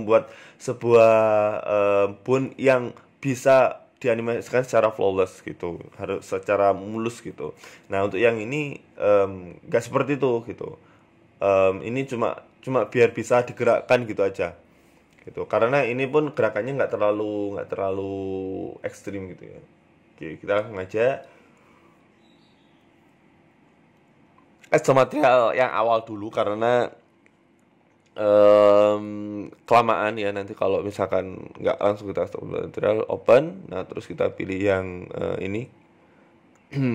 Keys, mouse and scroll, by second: 0.4 right click, 0.8-1.3 scroll down 2, 1.3 middle click, 1.4 Tab, 2.0 Tab, 3.3 middle click, 3.4 z, 4.4 z, 5.8 z, 6.0 z, 6.4 z, 7.1 middle click, 7.3-7.9 scroll down 2, 7.9 right click, 7.9 scroll down 1, 8.0-8.5 scroll up 4, 8.4 Tab, 8.6 z, 10.8 right click, 11.7 click, 12.3 middle click, 12.6 right click, 12.8 middle click, 13.9 KP_1, 16.9 click, 17.7 click, 23.3 click.